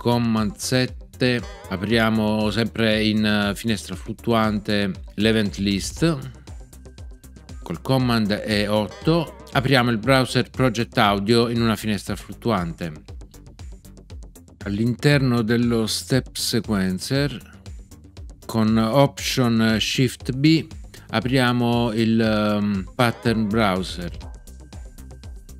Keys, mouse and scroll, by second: 1.4 super+7, 8.8 super+8, 22.9 alt+shift+b.